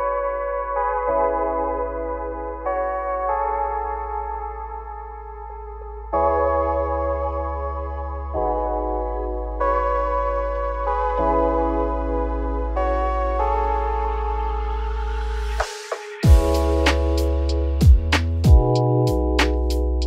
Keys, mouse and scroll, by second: 0.7 Tab, 1.0-2.0 middle drag, 2.0 Tab, 2.3 scroll down 1, 2.6 a, 2.9 `, 3.3-4.0 scroll down 9, 4.0 shift+middle click, 4.9 shift+d, 6.7 r, 9.3 shift+middle click, 9.5-10.0 scroll up 7, 10.0 z, 10.3 shift+middle click, 10.6-11.2 scroll up 3, 11.2 shift+middle click, 11.5 g, 13.1 z, 13.3 scroll down 2, 13.5 middle click, 13.9 `, 14.3 middle click, 14.7 g, 16.4-18.8 middle drag, 18.8 g.